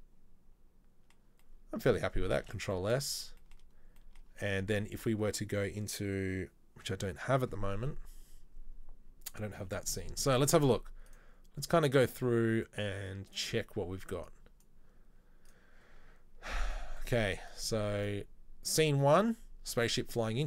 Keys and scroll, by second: 2.5 ctrl+s.